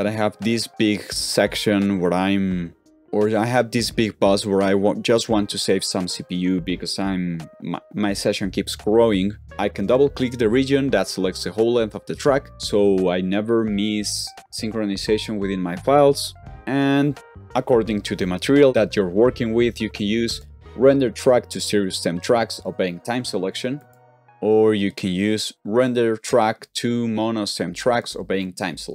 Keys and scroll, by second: 16.4 typing, 17.7-18.4 typing, 24.0 typing.